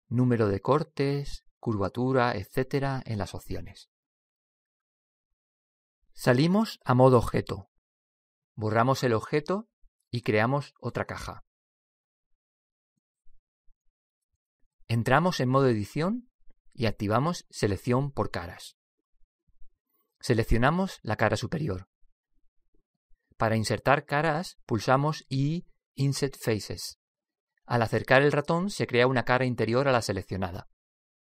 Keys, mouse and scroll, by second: 1.6-4.8 drag, 7.1 Tab, 9.1 x, 10.6 shift+a, 15.3-18.0 drag, 18.1 Tab, 19.5 click, 21.3-22.6 right drag, 21.6-24.6 middle drag, 26.0 i.